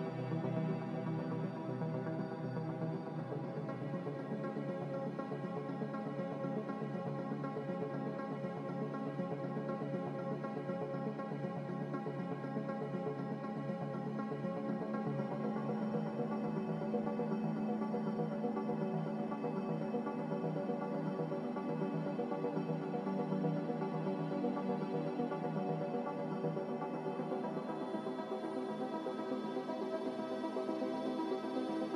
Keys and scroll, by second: 2.2-3.1 typing, 8.7 q.